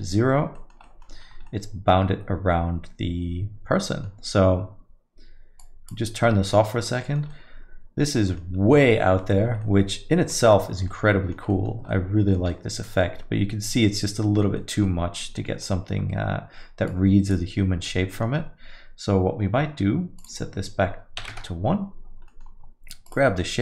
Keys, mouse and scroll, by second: 0.6 middle click, 0.8 alt+middle click, 1.2 scroll up 3, 1.5 alt+middle click, 5.6 click, 6.5 alt+middle click, 7.0 middle click, 7.3 alt+middle click, 8.3 middle click, 8.6 scroll up 2, 8.8 alt+middle click, 9.2 middle click, 9.4 scroll down 1, 9.6 alt+middle click, 10.4 middle click, 10.6 scroll down 2, 10.9 alt+middle click, 11.5 middle click, 11.7 scroll down 1, 11.9 middle click, 12.5 alt+middle click, 13.0 alt+middle click, 14.6 middle click, 14.9 alt+middle click, 16.9 click, 18.1 alt+middle click, 20.2 click, 22.3 middle click, 22.5-23.1 scroll down 1, 23.1 click, 23.4 alt+middle click.